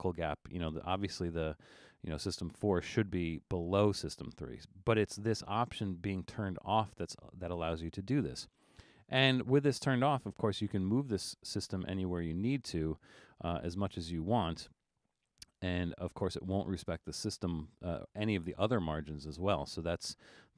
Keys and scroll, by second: 13.4 super+z, 14.3 super+z, 19.3 super+z.